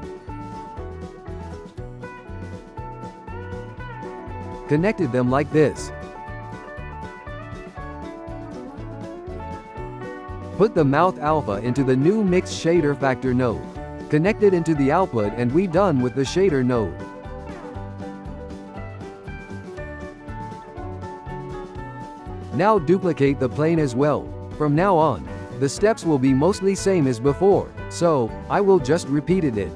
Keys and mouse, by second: 0.8 click, 1.5 g, 3.1 click, 5.8 click, 7.3-8.4 drag, 8.4-11.0 shift+middle drag, 11.0 click, 12.8-13.7 shift+middle drag, 13.7 click, 15.3 click, 15.5 g, 18.8-20.3 drag, 20.8-22.9 shift+middle drag, 22.9 shift+d, 25.3-28.0 shift+middle drag, 26.2 F2, 29.2 click.